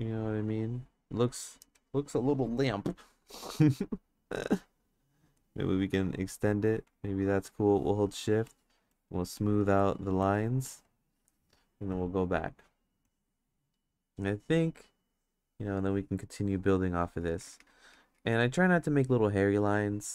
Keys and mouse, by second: 2.9 f, 3.8 click, 4.5 click, 5.4-6.6 drag, 6.9 click, 9.4-11.1 shift+drag, 12.0-13.1 drag, 15.1 click, 15.6 click, 17.7 ctrl+z, 17.9 ctrl+z, 18.6-20.1 drag.